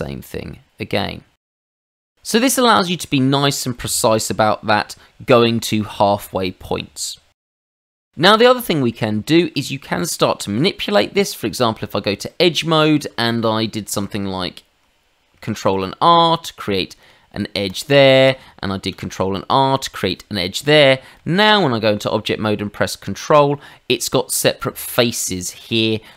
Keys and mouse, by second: 1.7 click, 1.9 middle click, 3.0 middle click, 3.7 ctrl+middle click, 7.8 ctrl+z, 8.4 middle click, 10.8 Tab, 12.3 middle click, 13.2 shift+middle click, 15.6 ctrl+r, 17.7 click, 17.9 Escape, 18.9 ctrl+r, 19.5 click, 19.8 Escape, 21.1 Tab.